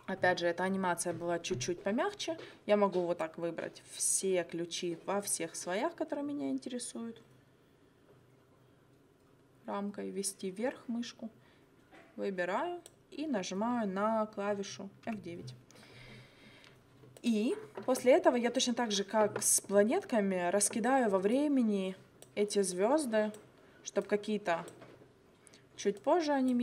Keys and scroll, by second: 15.1 F9.